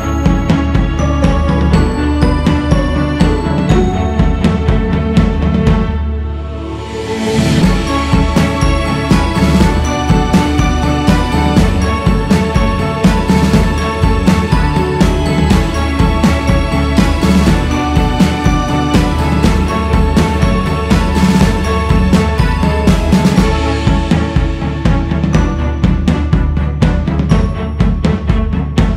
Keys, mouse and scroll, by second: 1.9-2.7 scroll up 3, 2.9-5.4 drag, 6.5-9.8 drag, 11.1-13.4 drag, 13.4 scroll up 3, 13.6-15.8 drag, 15.8 scroll down 2, 16.4-17.3 scroll down 2, 17.3-18.1 scroll down 3, 18.1 click, 19.6 click, 20.5-21.2 scroll up 6, 21.2 click, 22.4 x, 22.5 f, 26.2 click, 27.5-28.9 drag.